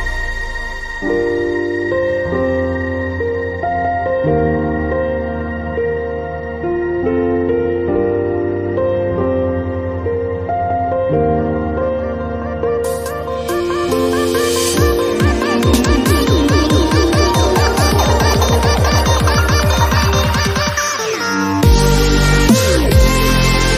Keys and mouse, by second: 0.0 click, 0.2 a, 0.3 b, 0.6 s, 1.4 middle click, 1.9-4.5 typing, 4.0 click, 4.6 click, 6.2 s, 6.6 click, 6.8 click, 7.2 a, 7.4 z, 8.4 middle click, 9.3 z, 9.5 b, 10.8 click, 11.1 middle click, 11.2 a, 11.4 ctrl+Tab, 12.1 click, 12.9 e, 13.4 KP_1, 14.2 s, 17.4 click, 17.7 s, 18.6 p, 18.8 KP_1, 19.0 z, 20.8 s, 21.5 e, 23.0 KP_1.